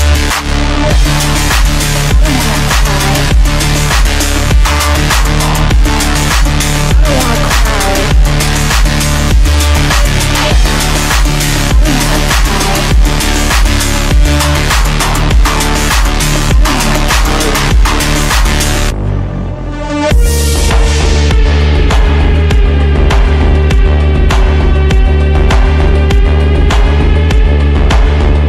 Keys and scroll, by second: 7.9 F3.